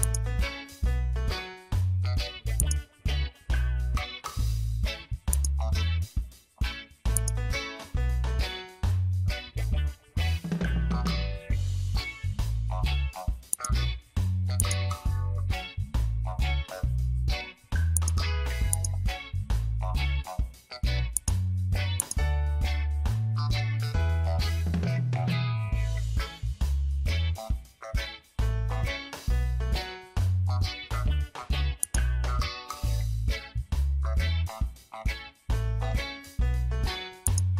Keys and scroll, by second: 3.8 ctrl+t, 11.3 Return, 32.9 ctrl+g, 34.3 ctrl+a.